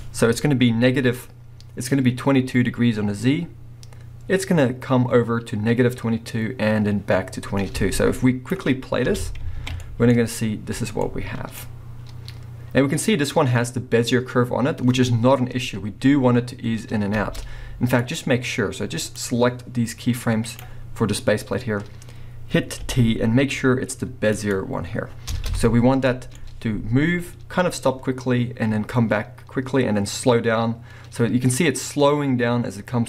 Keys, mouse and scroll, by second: 0.0 click, 0.8 click, 3.4-9.9 drag, 9.1 space, 10.2 scroll up 2, 15.3 middle click, 17.1 space, 18.0 click, 19.2-26.1 drag, 22.8 t, 25.3 space.